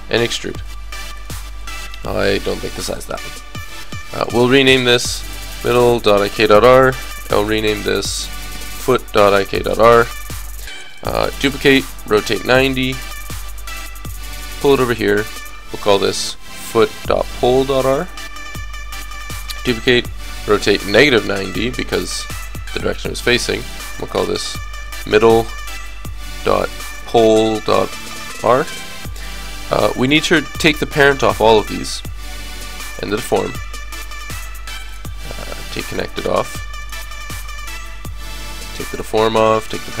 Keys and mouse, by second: 2.1 right click, 4.0 click, 4.8-6.1 drag, 5.2 d, 6.1-7.5 middle drag, 7.5 click, 8.7-9.7 drag, 8.7 right click, 8.7 o, 11.0 shift+d, 11.6 r, 14.1 g, 15.4-17.3 drag, 16.1 o, 19.1 click, 19.4 shift+d, 20.4 click, 20.4 r, 23.8-25.7 drag, 24.5 d, 31.3-33.1 drag, 33.3-40.0 drag, 34.1-35.8 right drag, 37.4-38.6 right drag, 38.8 right click.